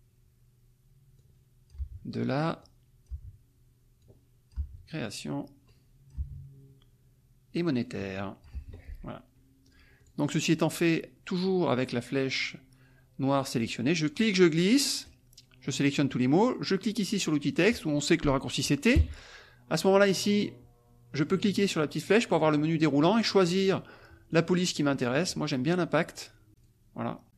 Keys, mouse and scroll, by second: 1.2 click, 1.8 BackSpace, 2.6 click, 3.1 BackSpace, 4.0 click, 4.5 BackSpace, 5.7 click, 6.1 BackSpace, 7.8 click, 8.5 BackSpace, 9.6 click, 9.9 click, 14.2-15.2 drag, 19.0 t, 19.7 click, 21.1 click, 22.1 click, 23.3 click, 24.3 click, 26.1 scroll down 2, 26.5 click, 27.2 click.